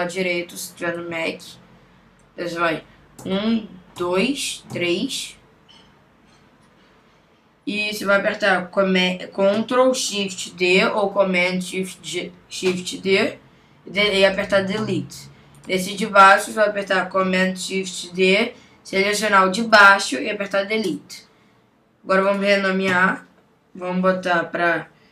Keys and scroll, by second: 3.2 super+Right, 10.7 shift+super+d, 18.1 shift+super+d, 22.9 Return.